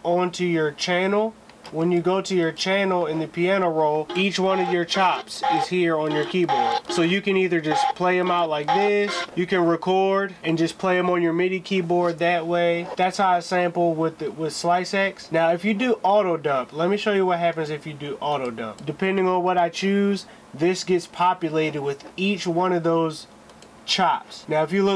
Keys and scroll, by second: 16.9 s.